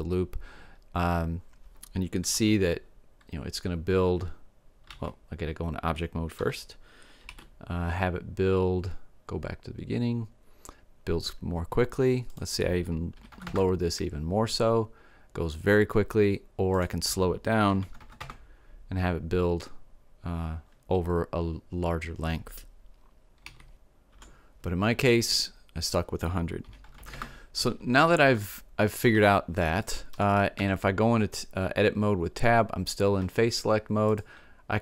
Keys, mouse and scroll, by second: 2.4 alt+a, 5.0 alt+a, 6.4 Tab, 7.3 alt+a, 12.3-14.3 drag, 16.8-18.8 drag, 18.1 KP_0, 23.5 alt+a, 26.9 KP_0, 27.1 click, 28.3-30.6 middle drag, 30.6 Tab.